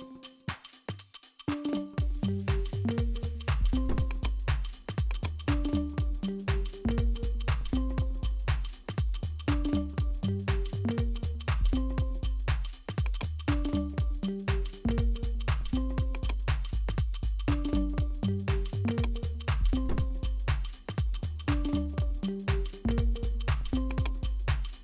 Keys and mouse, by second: 1.9 click, 2.5 Tab, 4.1-7.5 drag, 9.5-11.4 drag, 12.0-13.2 drag, 15.2 click, 18.9 click, 20.7-24.8 drag.